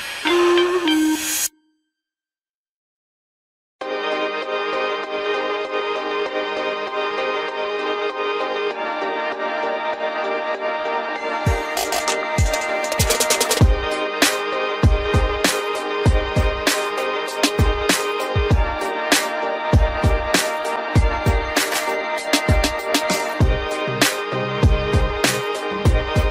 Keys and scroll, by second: 13.3 ctrl+t, 16.2 Return, 19.4 ctrl+z, 25.3 ctrl+t.